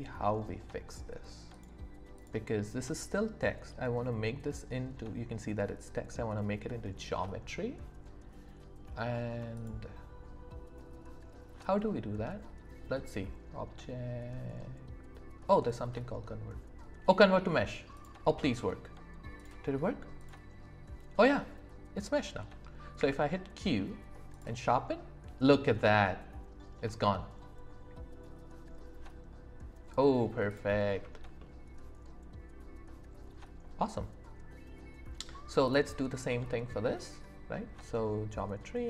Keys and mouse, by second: 1.5 click, 2.1 click, 9.5-18.0 drag, 19.4 click, 20.2 click, 23.0 q, 25.8-28.9 middle drag, 29.2 middle click, 31.4-35.2 middle drag, 36.3 click, 36.3 right click.